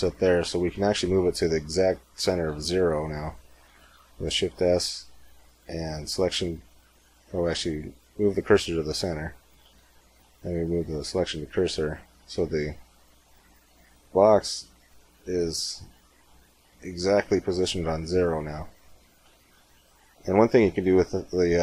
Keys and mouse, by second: 0.1 space, 6.2 shift+s, 9.5 shift+s, 12.0-13.8 middle drag, 13.8 KP_1, 16.9 middle click, 18.8-20.6 middle drag.